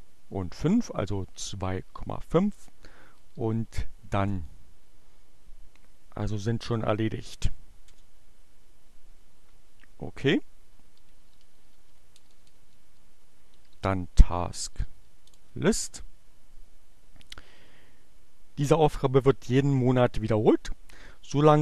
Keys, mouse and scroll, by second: 0.2 5, 1.9-2.8 typing, 4.3 e, 6.9 Return, 9.3-10.4 typing, 11.6-15.6 typing.